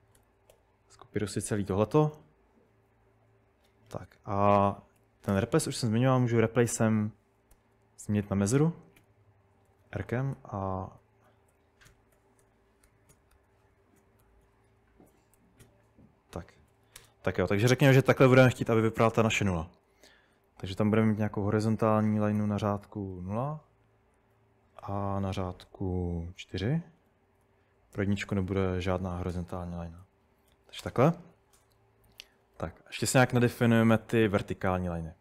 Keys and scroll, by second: 0.0-2.0 typing, 5.0-21.3 typing, 22.4-23.1 typing, 24.8 typing, 26.4-32.6 typing.